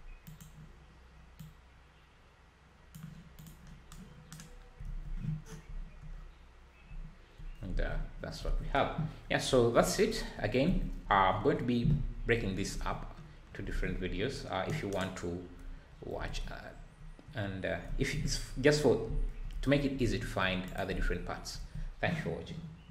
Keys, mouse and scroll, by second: 1.4 click, 5.4 scroll down 4, 5.6 `, 6.1-6.9 scroll up 2, 9.2 scroll down 2, 9.8 scroll up 4, 10.0 `, 13.1 scroll down 4, 15.9-17.0 scroll down 2, 17.0 `, 20.6 click, 21.0 ctrl+s, 21.2-22.6 scroll up 2, 22.6-22.9 scroll up 1.